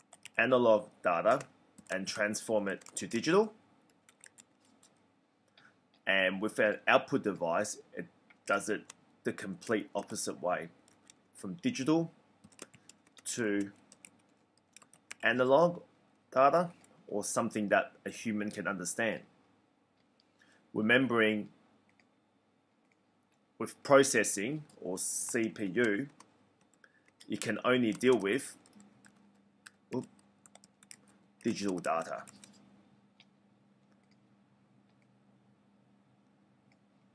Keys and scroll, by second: 0.0-0.2 typing, 1.7-4.3 typing, 9.4-11.0 typing, 12.4-15.0 typing, 25.0-32.2 typing.